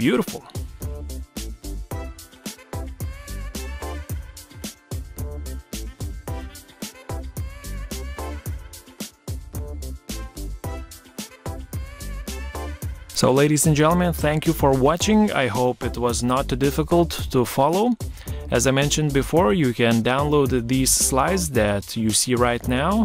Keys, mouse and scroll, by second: 2.1 Escape, 11.2 Caps_Lock, 11.7-13.4 typing, 14.6-16.7 typing, 18.1-22.1 typing.